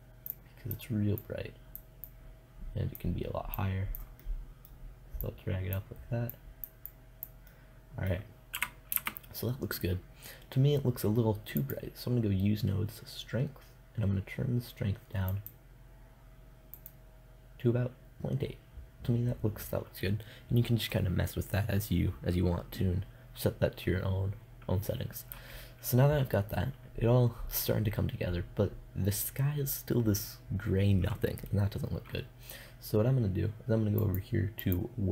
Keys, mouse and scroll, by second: 8.0 KP_0, 8.4 shift+z, 12.9-14.3 drag, 14.7-18.0 drag, 33.4-35.1 drag.